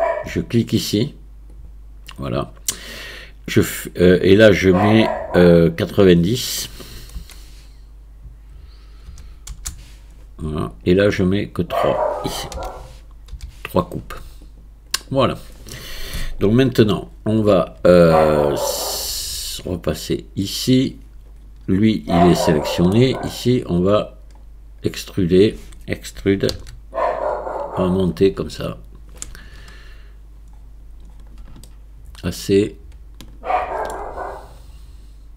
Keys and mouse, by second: 1.6 click, 6.3-14.5 drag, 20.0 click, 22.5 shift+middle click, 26.5 e, 28.0-29.2 drag, 31.7-33.9 shift+middle drag.